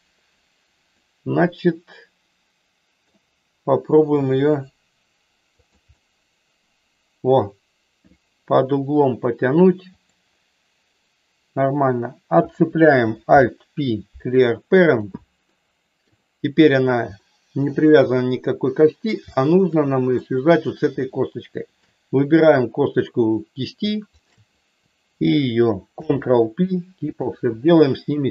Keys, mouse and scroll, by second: 1.0-3.2 middle drag, 3.9 e, 5.5 click, 5.9-9.5 middle drag, 10.0 click, 11.0 right click, 13.2 alt+p, 15.5 middle click, 17.1 shift+middle click, 18.1-19.1 middle drag, 19.2 shift+middle click, 20.3 click, 24.1 shift+click, 26.0 ctrl+p.